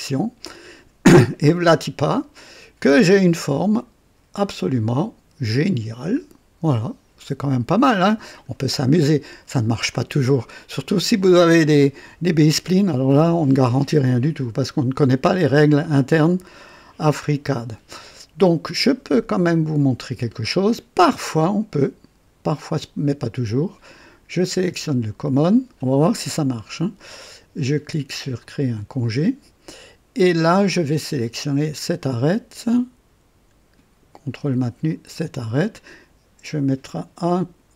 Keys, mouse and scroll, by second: 1.3-8.6 drag, 8.9 scroll up 2, 9.9-11.5 drag, 17.5 scroll up 2, 18.1-18.8 right drag, 24.3 click, 28.3 click, 30.4 click, 31.6 click, 34.8 ctrl+click.